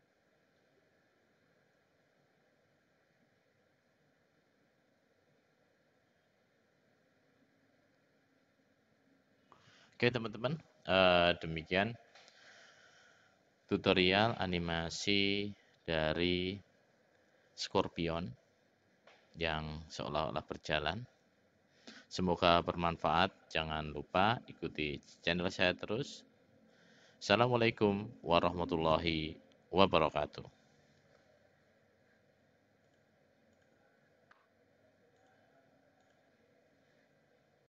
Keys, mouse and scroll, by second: 32.9 click, 33.5 click, 35.3-36.7 drag.